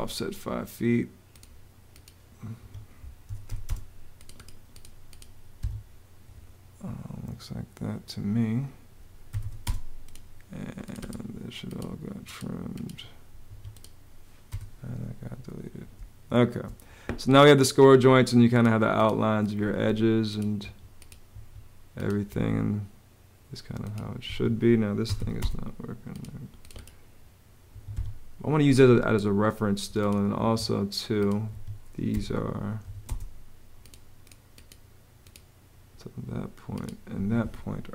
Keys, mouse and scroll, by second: 2.3 Escape, 2.8-3.7 typing, 5.3 Escape, 8.8-9.6 typing, 13.2 Escape, 14.2 BackSpace, 15.7 space, 19.4 Escape, 24.0 Home, 24.6-25.4 typing, 27.5 Escape, 30.2 Escape, 31.8 m, 32.6 a, 32.8 space, 36.9 Escape.